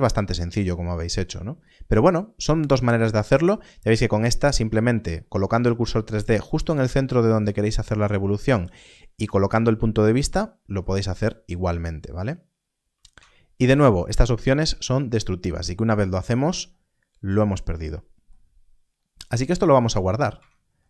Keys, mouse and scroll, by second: 10.9 Tab, 10.9 scroll down 1, 12.1-13.0 scroll up 1, 13.0-15.0 scroll, 20.2 Tab.